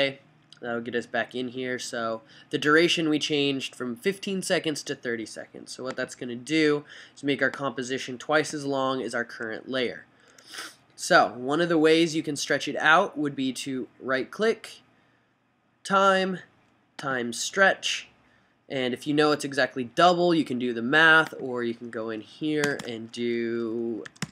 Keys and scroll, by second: 22.2 fn+Right, 22.8 BackSpace, 24.0-24.3 typing.